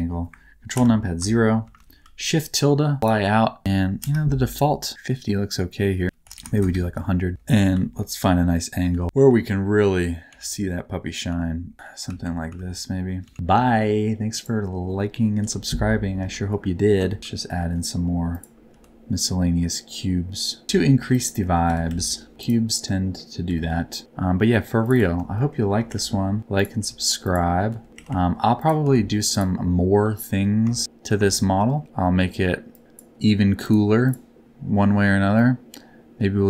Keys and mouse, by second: 0.7 ctrl+KP_0, 1.6 shift+`, 2.5-3.0 s, 3.0 w, 3.9 KP_0, 6.0 click, 6.4 KP_0, 7.3 s, 7.3 a, 7.3 w, 9.2-13.2 typing, 13.6 shift+middle click, 14.3 middle click, 15.3 KP_7, 17.2 shift+d, 17.2 r, 18.6 g, 20.6 Tab, 20.9 3, 21.3 middle click, 21.6 g, 21.8 z, 22.3 Tab, 22.3 click, 22.8 middle click, 23.4 g, 24.8 click, 24.9 click, 25.3 shift+middle click, 26.4-28.8 typing, 26.5 middle click, 27.2 middle click, 28.5 middle click, 29.2 middle click, 31.4 shift+middle click, 32.7 middle click.